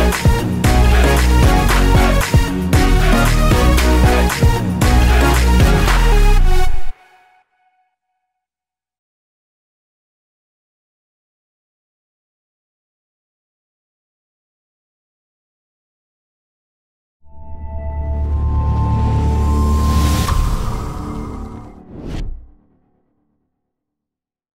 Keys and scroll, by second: 0.1 ctrl+=, 0.3 ctrl+-, 0.9 ctrl+=, 1.2 ctrl+-, 1.4 ctrl+=, 9.9 Return.